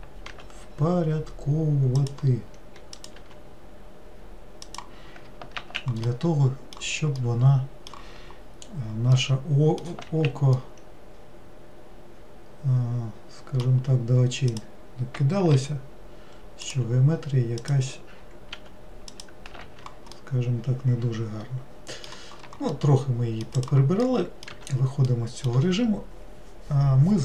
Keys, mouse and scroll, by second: 3.1 click, 6.1-8.5 middle drag, 8.5 scroll down 2, 9.3 middle click, 10.2 alt+z, 10.7-13.8 middle drag, 14.6 click, 17.7 click, 20.3-23.7 middle drag, 23.7 click, 24.2 middle click, 24.6 Tab, 25.2-27.2 middle drag.